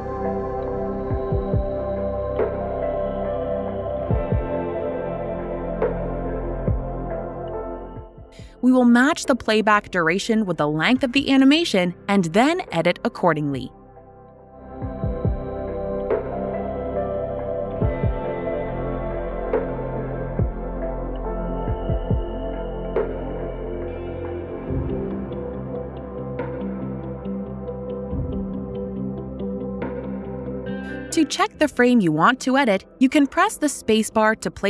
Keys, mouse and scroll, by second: 3.6 click, 8.7 click, 12.2 click, 13.2 typing, 14.0 Return, 17.2 typing, 17.3 alt+click, 17.8 middle click, 21.0 middle click, 21.1 middle click, 21.5 middle click, 21.5 middle click, 22.6 scroll, 23.6 middle click, 23.7 middle click, 23.7-24.7 scroll, 28.1 alt+right click, 29.9 click, 31.4 click.